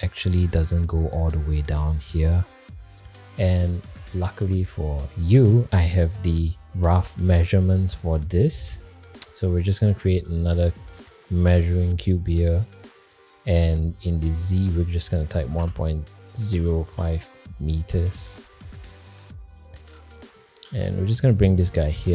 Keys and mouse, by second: 7.4 click, 7.9 Tab, 9.8 shift+a, 12.2 middle drag, 13.8-18.7 drag, 19.1 middle click, 19.5 shift+middle drag, 20.6 g, 21.5 middle drag, 21.9 g.